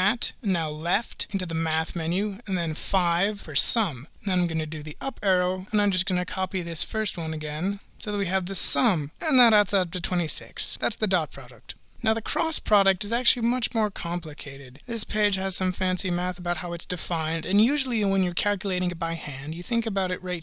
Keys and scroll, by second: 0.7 (, 3.4 5, 4.4 Up, 5.6 Return, 5.6 Up, 7.7 Return, 9.2 Return.